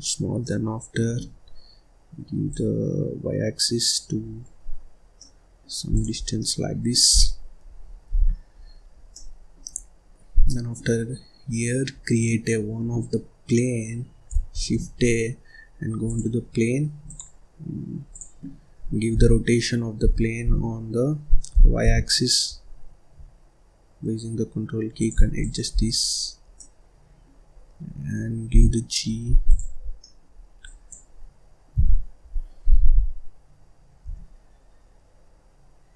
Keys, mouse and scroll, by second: 0.3-2.4 middle drag, 2.4-4.1 drag, 4.1 scroll down 1, 4.6-5.1 scroll up 1, 5.1 middle click, 5.8 click, 6.1 scroll down 1, 6.3 middle click, 7.0 scroll down 1, 7.2-8.0 scroll up 2, 8.0 ctrl+s, 8.5-9.0 scroll up 1, 9.0 middle click, 9.6-10.0 scroll down 3, 10.0-10.4 scroll up 1, 10.4 middle click, 10.8-11.9 scroll up 6, 11.9-12.6 scroll down 7, 12.6-12.9 scroll up 1, 14.5 shift+a, 17.0-19.1 drag, 19.1 r, 25.4 click, 25.7-26.0 scroll down 1, 26.0-26.5 scroll up 1, 26.5-27.5 middle drag, 27.5-28.1 scroll up 1, 28.1-28.5 scroll down 2, 28.5 g, 29.4 click, 29.8 scroll down 1, 30.0 middle click, 30.3 scroll up 2, 30.6 click, 31.7 g.